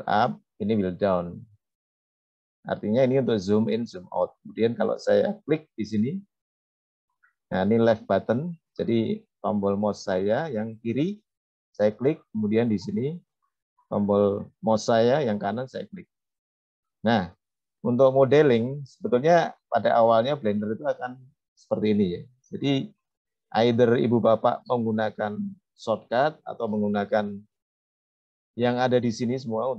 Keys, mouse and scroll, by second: 0.6-1.8 scroll down 4, 2.8-3.3 scroll up 3, 3.3-4.2 scroll down 1, 5.3 click, 6.1 click, 6.5 click, 6.7 click, 6.9 click, 7.1 click, 7.3 click, 9.0 click, 9.2 click, 9.4 click, 12.6-16.1 right drag.